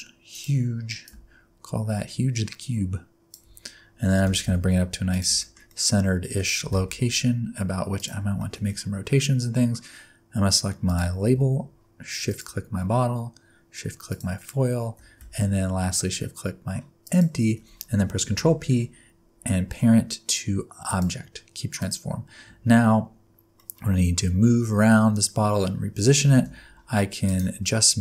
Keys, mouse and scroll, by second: 0.3 click, 1.0 click, 3.7-4.0 scroll up 2, 4.1 g, 5.4 shift+middle click, 5.7 middle click, 6.6 g, 8.3 shift+middle click, 8.6 middle click, 10.8 click, 12.2 shift+click, 14.1 shift+click, 17.0 shift+click, 18.4 ctrl+p, 21.7 click, 23.5 middle click, 26.2 r.